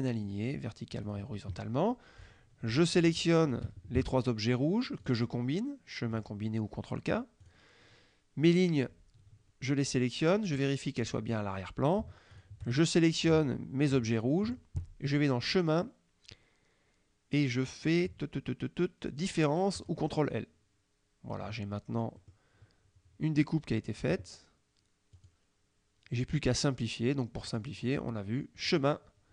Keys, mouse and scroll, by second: 0.3 click, 1.1 click, 2.2 click, 3.0 shift+click, 3.5 shift+click, 5.1 click, 6.2 click, 7.5 click, 11.1 click, 12.4 shift+click, 15.2 click, 19.9 click, 22.3 middle click, 25.2 click, 27.6 click, 28.7 click.